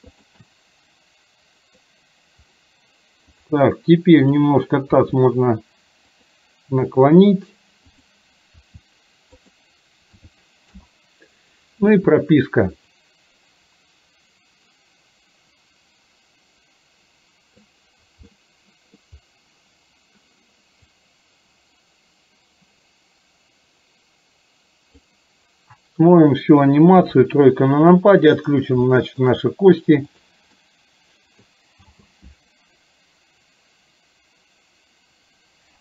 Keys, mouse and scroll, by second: 0.5-2.0 middle drag, 3.5 click, 4.2 click, 5.1 r, 8.0 click, 8.6 r, 10.2 a, 10.7 i, 13.0-17.7 drag, 18.4-19.0 middle drag, 21.0-25.1 drag, 27.0 KP_3, 29.0 shift+middle click, 30.2 click, 30.6-31.5 middle drag, 31.9 space.